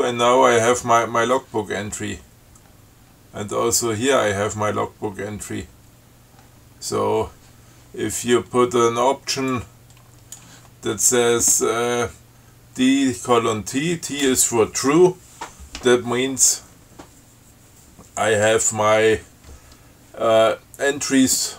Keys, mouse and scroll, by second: 1.5 scroll down 2, 2.2 scroll down 2, 2.9-3.7 scroll down 4, 6.0-7.8 scroll down 10, 9.8 click.